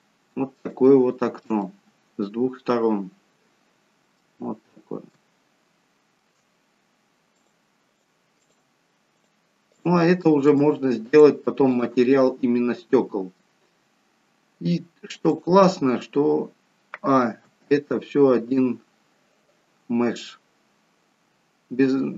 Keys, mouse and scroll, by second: 0.8 shift+middle click, 1.5-3.3 scroll up 2, 1.7 middle click, 3.3-4.5 scroll up 1, 4.5-5.1 scroll down 2, 5.1 middle click, 5.1 scroll down 2, 7.3 click, 8.0 click, 8.5 click, 10.5 shift+click, 11.1 shift+click, 11.9 click, 12.3 middle click, 13.8-14.7 scroll down 1, 15.2 click, 15.2-15.6 scroll down 1, 17.5 a.